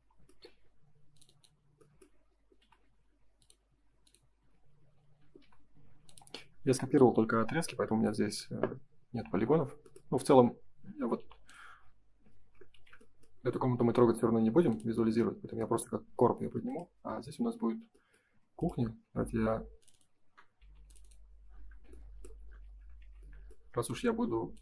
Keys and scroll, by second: 4.3 space, 5.3 l, 8.3 Escape, 9.1 space, 12.7 shift+f, 17.4 Escape, 18.2 space, 20.5 Escape, 22.9 shift+f.